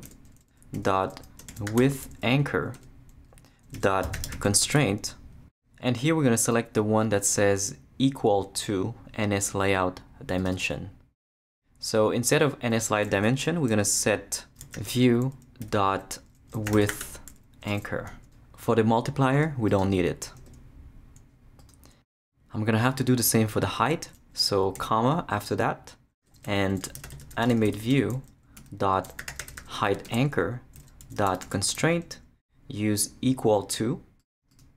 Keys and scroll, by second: 0.0-2.3 typing, 2.7 Return, 3.5-4.8 typing, 14.4-17.5 typing, 17.7 Return, 20.4 shift+BackSpace, 21.0 BackSpace, 26.2 Return, 26.6-31.9 typing.